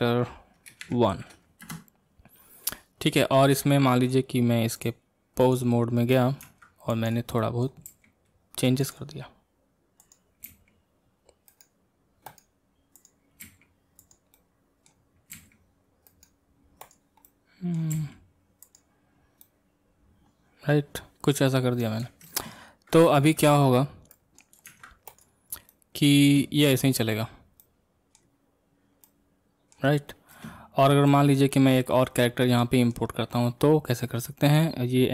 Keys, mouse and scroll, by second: 3.5-4.8 middle drag, 4.8 click, 5.4 click, 6.4 ctrl+Tab, 6.9 click, 7.4-7.9 middle drag, 7.9 r, 10.0 click, 10.5 r, 13.0 click, 13.4 r, 14.4-15.3 middle drag, 15.3 r, 17.2 scroll up 1, 17.2 middle click, 17.9 r, 19.4-22.3 middle drag, 23.1 ctrl+space, 23.6-24.1 scroll down 1, 24.1-24.7 middle drag, 24.7 ctrl+Tab, 25.2 click, 25.7 middle click, 26.2 space, 26.9-27.6 scroll down 3, 27.6-30.3 middle drag, 30.3 space, 30.7-31.1 scroll down 1, 31.1-34.0 middle drag, 34.0-35.1 drag.